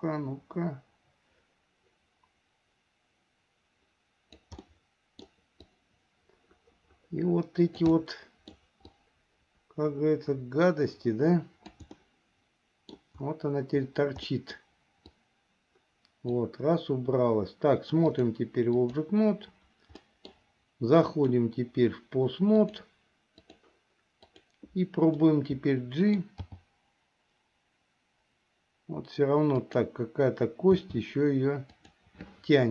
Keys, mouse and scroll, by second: 4.9 middle click, 5.8-8.0 drag, 8.1 middle click, 9.0-11.9 drag, 12.2-13.2 middle drag, 14.5 middle click, 15.2-16.5 drag, 18.2 click, 20.2 middle click, 21.2 click, 22.7-23.8 drag, 24.4 click, 25.3-26.4 middle drag, 26.6 g, 30.9 r.